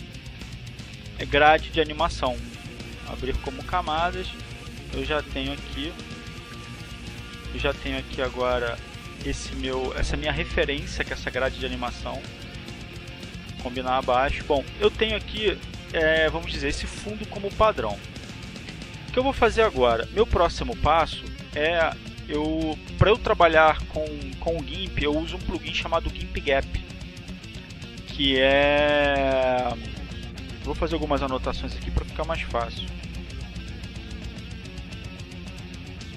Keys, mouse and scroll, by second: 2.3 click, 3.6 click, 4.9 click, 11.1 click, 12.1 click, 21.4 click, 22.7 click, 29.9 r, 31.9 a, 32.3 r, 33.8-34.2 scroll up 2, 35.8 click.